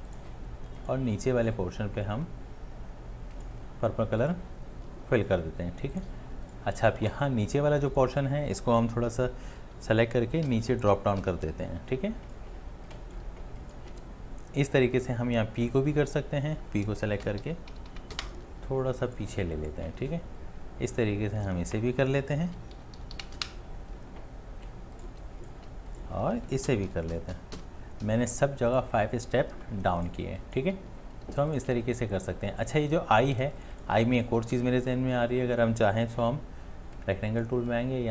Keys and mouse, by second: 10.4 ctrl+z, 10.7 Down, 10.9 Down, 11.2 Down, 12.6 space, 13.1 click, 13.2 click, 13.2-13.6 space, 13.6 click, 13.7 click, 13.8 space, 17.2 space, 17.4 Left, 17.7 Left, 17.9 Left, 18.1 Left, 22.5 Down, 22.7 Down, 23.0 Down, 23.1 Down, 23.3 Down, 26.9 Down, 27.1 Down, 27.3 Down, 27.6 Down, 29.4 space, 30.5 click, 30.6 space, 31.9 space, 33.9 ctrl+space.